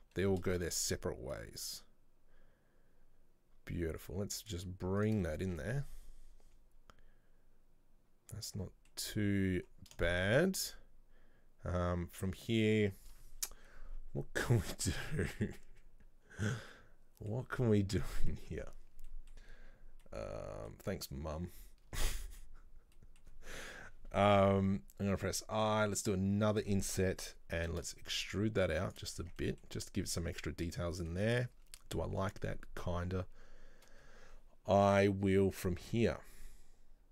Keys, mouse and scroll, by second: 5.4 scroll down 2, 5.6 Tab, 5.7-8.8 middle drag, 9.2-9.7 scroll up 1, 10.2-13.2 shift+middle drag, 16.9-22.0 middle drag, 22.0 Tab, 22.3-25.2 middle drag, 25.2 typing, 29.3 scroll down 2, 29.4 Tab, 29.5-31.0 middle drag, 31.0 scroll up 1, 31.2-31.7 middle drag, 31.7-32.5 scroll up 1.